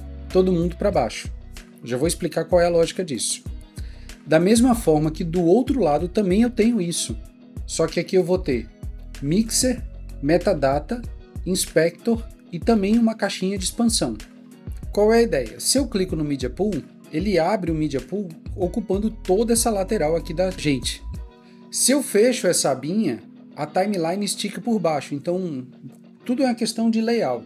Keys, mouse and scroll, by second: 4.2 ctrl+1, 4.2 Escape, 6.5 ctrl+1, 8.8 ctrl+click, 12.4 ctrl+click, 14.5 Escape.